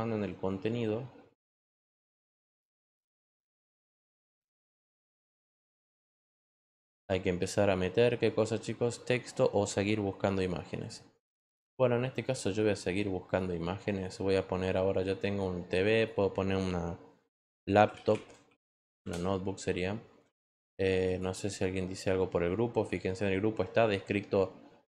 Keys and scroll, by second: 17.4-19.3 typing.